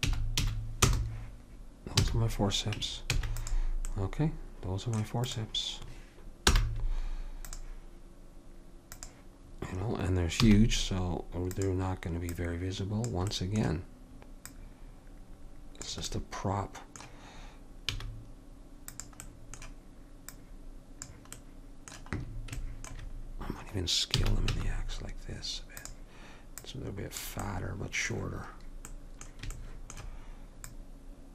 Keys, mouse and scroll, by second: 2.2 a, 3.2 ctrl+s, 5.4-7.3 drag, 6.7 m, 9.0-10.9 drag, 10.5 s, 12.4 click, 15.2-16.4 drag, 16.3-18.1 middle drag, 18.1 s, 20.5 click, 21.6 middle click, 24.3 s, 26.7 click, 27.7 click, 28.6-30.8 middle drag, 30.8-31.3 drag.